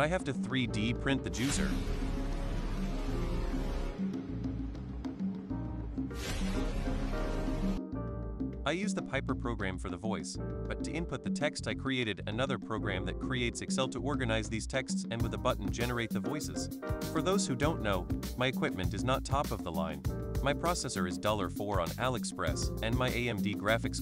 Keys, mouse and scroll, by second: 0.0 ctrl+alt+super+g, 0.5 click, 0.9 click, 1.6 click, 2.8 click, 3.4 click, 4.1 click, 4.7 super+click, 5.5 super+click, 6.2 super+click, 6.7 super+click, 7.2 super+click, 7.4 super+click, 8.1 super+click, 8.5 super+click, 8.6 super+click, 9.2 super+click, 9.5 super+click, 10.1 super+click, 10.4 super+click, 11.2 super+click, 13.4 super+click, 14.0 super+click, 14.4 super+click, 15.0 super+click, 15.5 super+click, 16.5 super+click, 16.7 super+click, 16.9 super+click, 17.3 ctrl+super+c, 17.7 super+click, 18.1 super+click, 18.4 super+click, 19.0 super+click, 19.4 super+click, 19.7 ctrl+super+c, 20.1 super+click, 20.1 super+right click, 20.4 super+click, 20.7 super+click, 21.1 super+click, 21.5 super+click, 21.8 super+click, 22.1 super+click, 22.5 super+click, 23.0 super+click, 23.5 super+click, 23.8 super+click.